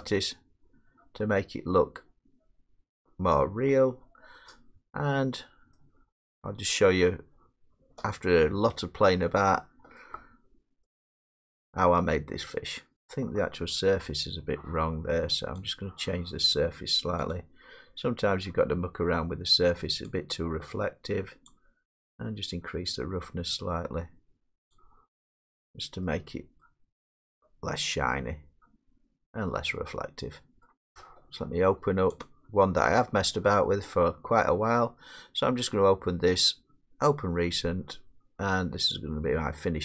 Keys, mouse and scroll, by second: 3.6-4.0 scroll, 4.0 middle click, 5.7 middle click, 7.7 scroll down 2, 7.8-8.2 scroll down 2, 8.2 scroll, 10.0 middle click, 10.3 middle click, 10.9 middle click, 11.2 middle click, 11.3 middle click, 11.8 scroll down 5, 11.9-12.9 scroll down 1, 12.9 middle click, 13.0 middle click, 15.7 click, 17.5 click, 18.0 middle click, 18.1-20.8 scroll, 21.5 click, 22.7 middle click, 24.7 click, 25.3 middle click, 25.4 middle click, 25.5 middle click, 26.0 middle click, 26.1 middle click, 26.2 middle click, 27.1 scroll down 4, 27.1 middle click, 30.7 middle click, 30.8 middle click, 31.6 middle click, 32.2 click.